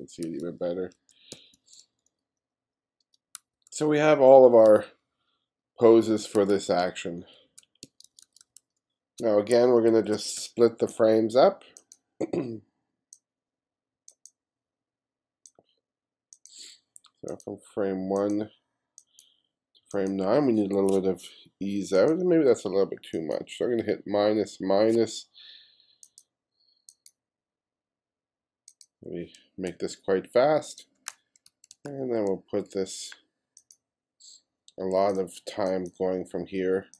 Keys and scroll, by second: 0.3 f, 1.3 g, 3.4 f, 4.7 g, 6.4 f, 7.9 g, 9.9 1, 10.4 space, 24.2 -, 24.9 -, 29.7 shift+=, 31.2 shift+=.